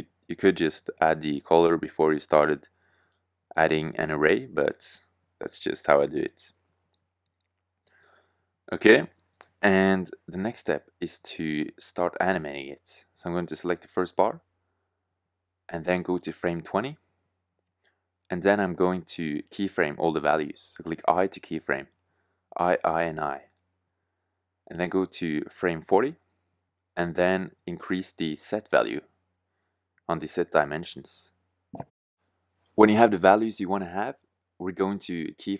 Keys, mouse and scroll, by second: 5.4 shift+z, 9.3 shift+z, 14.2-15.2 drag, 15.2 middle click, 17.5-18.0 middle drag, 21.3 i, 21.6 i, 22.1 i, 22.6 i, 23.7-25.4 drag, 27.5-30.3 middle drag, 30.3-32.5 drag.